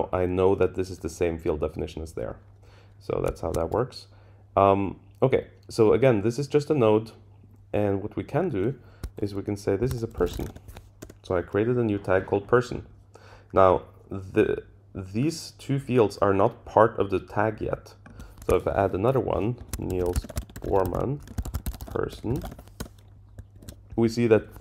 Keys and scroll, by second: 3.1 Up, 3.4 shift+Down, 11.0 Return, 22.8 Return, 23.5 super+Down.